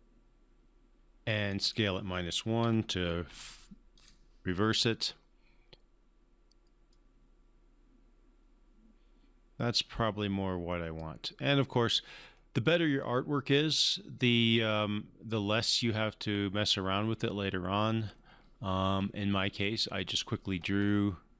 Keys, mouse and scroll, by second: 1.5 click, 2.6-3.3 typing, 3.9 click, 6.9-11.3 drag.